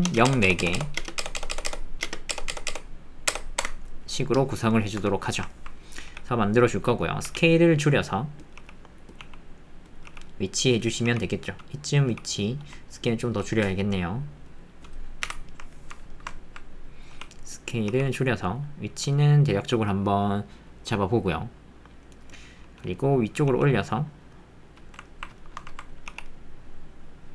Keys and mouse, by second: 0.0-2.5 typing, 3.6 KP_Enter, 5.0 Tab, 5.5 ctrl+click, 6.1 g, 7.2 s, 8.6 g, 9.2 s, 10.0 g, 12.6 s, 13.4 g, 15.2 KP_Decimal, 15.7 ctrl+middle click, 17.1 s, 17.9 g, 22.5 middle click, 23.1 middle click, 25.4 shift+middle click.